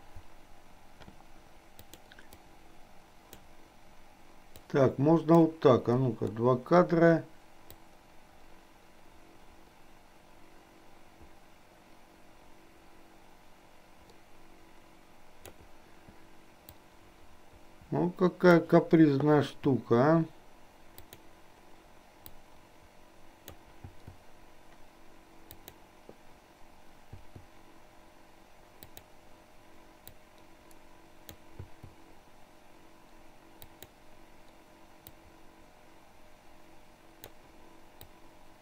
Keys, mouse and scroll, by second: 1.9 click, 2.5-3.5 drag, 4.5-5.5 drag, 6.2 Delete, 7.9-15.7 drag, 16.8 click, 17.3-18.8 drag, 19.5 i, 21.0 click, 22.4-23.7 drag, 24.0 i, 25.7 click, 27.2 i, 28.9 click, 30.5-31.5 drag, 33.7 click, 35.0-37.5 drag, 38.2-38.6 drag.